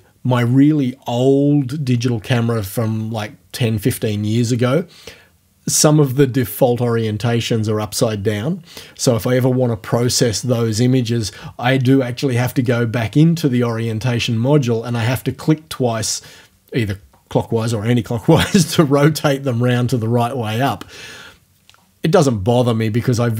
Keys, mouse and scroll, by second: 12.6 click.